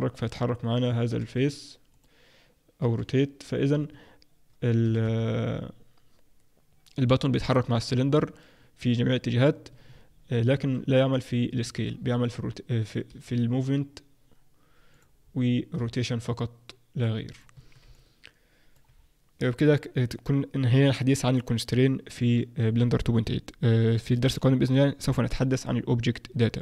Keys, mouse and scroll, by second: 1.1 g, 2.8 r, 4.8 r, 13.1 g, 15.2-15.7 scroll down 2, 15.7-16.1 scroll down 1, 15.7 r, 17.5 Tab, 17.5-17.9 scroll down 2, 17.9 middle click, 18.9-20.6 scroll down 1.